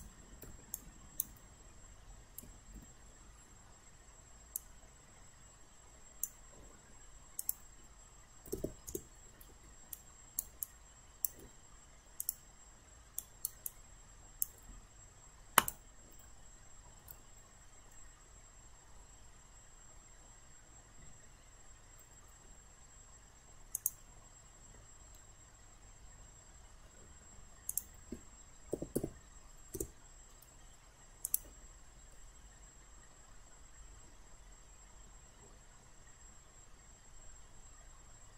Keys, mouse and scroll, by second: 0.0 click, 0.8 alt+right click, 2.8 e, 4.6-6.9 drag, 8.5 9, 8.9 Return, 10.0 alt+right click, 10.6 alt+click, 12.2 click, 13.2 alt+right click, 13.7 alt+click, 15.6 click, 18.0-22.9 middle drag, 23.8-24.9 drag, 25.2-26.9 middle drag, 27.7 click, 28.5-29.5 typing, 29.8 Return, 31.2 click, 32.2-38.3 middle drag.